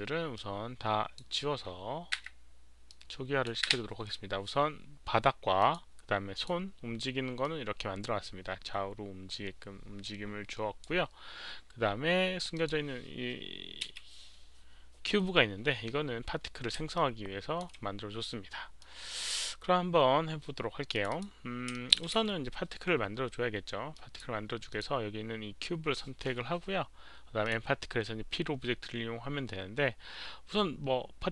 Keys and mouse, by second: 0.2 click, 2.1 Delete, 2.1 click, 2.7-3.3 drag, 3.5 Delete, 5.5 click, 6.2 click, 7.3-10.7 drag, 11.6 click, 12.4 click, 13.7 Delete, 13.7 click, 13.9 h, 14.3 click, 16.8-17.5 alt+drag, 18.7-19.2 alt+drag, 20.8 alt+click, 20.8 h, 21.0 click, 21.1 h, 21.6 alt+click, 23.8 alt+click, 23.8 q, 24.6 alt+click, 27.3 alt+click.